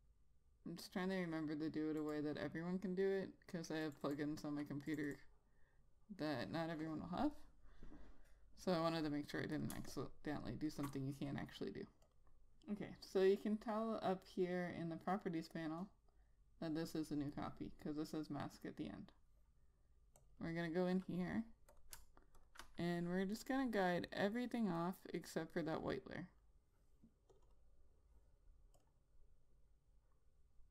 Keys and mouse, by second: 2.5 click, 4.5 double click, 5.3 click, 5.5 double click, 10.0 click, 10.2 space, 10.4 click, 10.7 space, 12.6 click, 17.8 click, 20.8 double click, 22.2 click, 23.8 right click, 25.3 click, 25.7 right click, 27.8 click, 27.9 double click, 29.3 click.